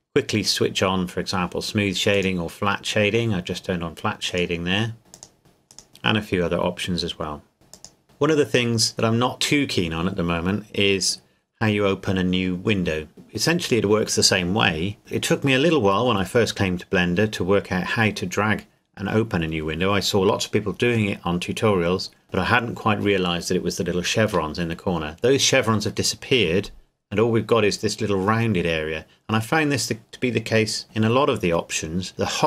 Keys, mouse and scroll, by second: 2.1 click, 4.3 right click, 5.1 click, 5.7 right click, 7.7 click.